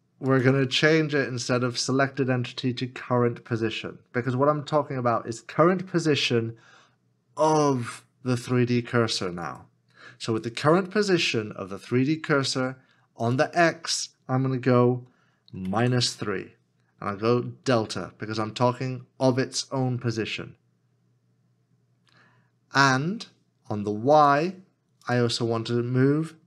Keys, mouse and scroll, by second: 15.7 typing.